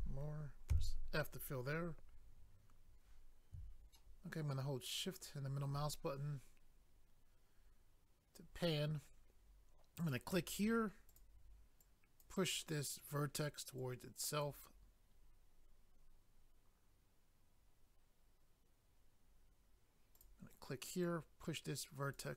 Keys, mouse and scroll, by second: 0.7 f, 3.9 shift+middle click, 10.0 click, 10.1 click, 11.1 click, 11.2 click, 11.8 click, 13.0 click, 13.1 click, 13.8 click, 20.1 click, 20.2 click, 21.0 click.